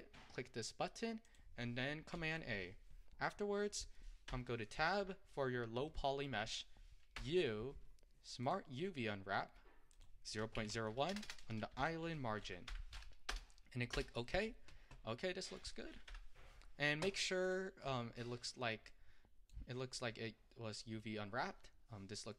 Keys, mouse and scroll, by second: 2.2 a, 4.4 Tab, 5.4-13.3 middle drag, 13.3 BackSpace, 15.3 middle click, 16.1 Tab, 17.6 click, 20.0-20.6 scroll up 4, 20.6-21.1 scroll up 3, 21.1-22.3 middle drag.